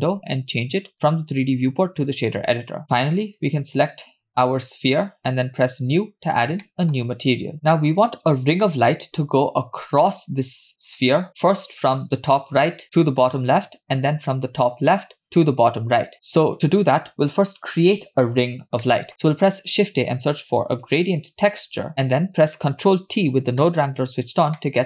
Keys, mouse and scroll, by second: 0.9-2.4 drag, 3.3 click, 4.3 click, 5.7 click, 6.7 middle click, 7.0-7.5 scroll up 2, 18.8 middle click, 19.2 shift+a, 21.9 click, 23.1 ctrl+t, 24.0-24.6 scroll up 3, 24.6 middle click.